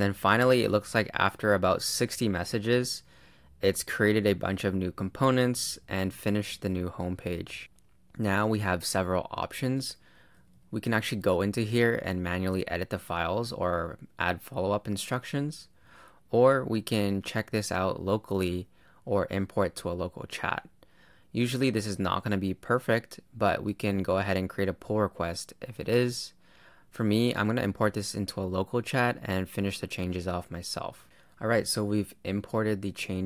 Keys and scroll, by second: 11.1 BackSpace, 12.5 BackSpace, 32.9 super+Return.